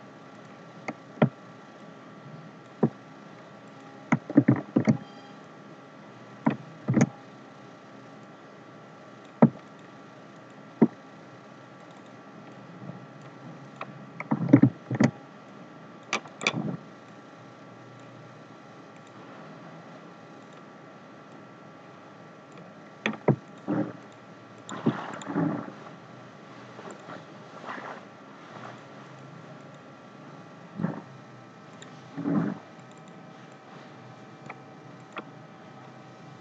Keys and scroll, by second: 4.3 ctrl+c, 4.8 ctrl+f, 14.5 ctrl+c, 14.8 ctrl+f.